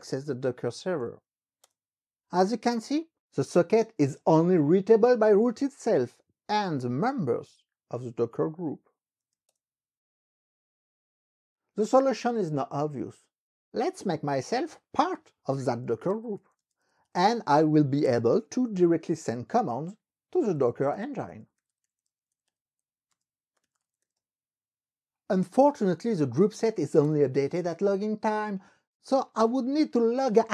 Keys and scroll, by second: 0.0-1.3 typing, 1.7 Return, 9.0-9.8 typing, 15.3-24.5 typing, 26.3-27.2 typing.